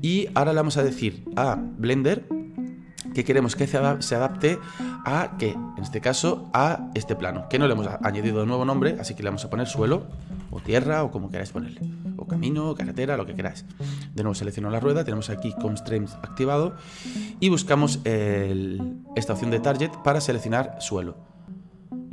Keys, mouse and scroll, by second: 5.4-6.3 scroll down 1, 8.6 click, 8.8-11.8 drag, 14.4 right click, 20.5-22.1 drag.